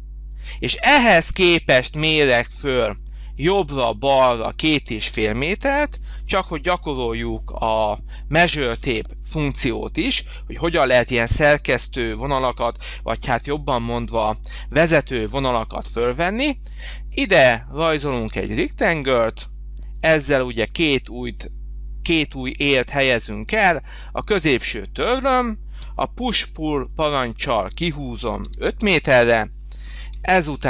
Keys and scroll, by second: 5.8 2, 6.4 ,, 6.7 5, 8.6 Return, 11.9 2, 13.0 5, 14.7 Return, 18.6 Return, 26.1 p, 28.3 5, 28.7 Return, 30.4 space.